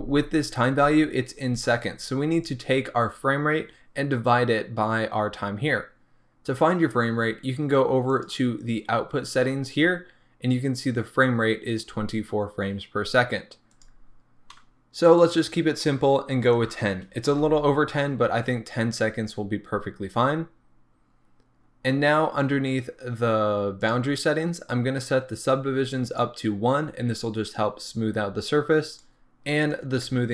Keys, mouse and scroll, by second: 13.7 click, 15.2-30.3 drag, 17.4 Return, 21.4-23.8 scroll down 1, 24.1-26.0 scroll down 1.